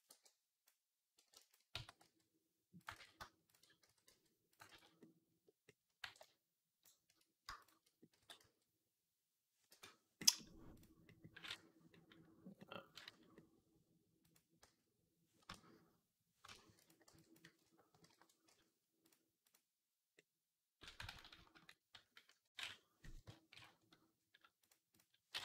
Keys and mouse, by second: 1.0 b, 1.6 s, 2.8 ctrl+z, 3.7 s, 4.5 ctrl+z, 5.9 b, 8.0 s, 8.8-10.1 drag, 10.2-11.9 drag, 12.0-13.2 drag, 13.3 click, 14.5 s, 16.7 click, 16.9 b, 17.9 alt+p, 19.3 click, 20.9 ctrl+z, 21.2 ctrl+z, 23.4 alt+p.